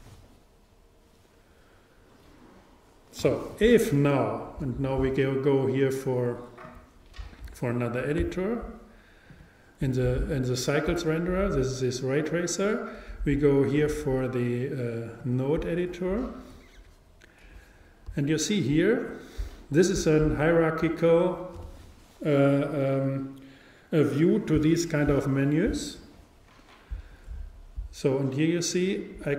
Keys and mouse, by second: 6.7-29.3 drag.